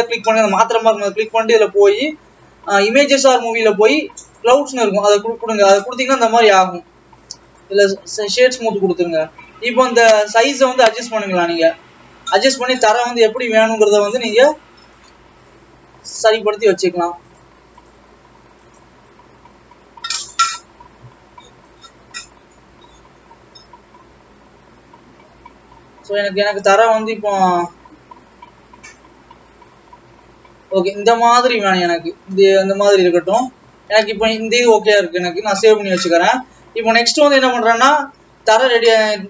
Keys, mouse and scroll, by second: 3.3-5.2 drag, 5.2-6.5 scroll up 7, 6.5-8.7 right drag, 8.7-10.2 scroll down 5, 10.2-13.3 drag, 16.7-17.7 drag, 17.9-19.9 drag, 19.9-21.2 scroll down 3, 21.2-21.8 scroll up 2, 21.8-24.7 drag, 32.7-35.2 middle drag, 35.2-36.0 scroll down 2, 36.0 scroll down 5, 36.7 ctrl+s, 36.9 scroll down 2, 37.9 scroll up 2, 38.5 scroll up 3.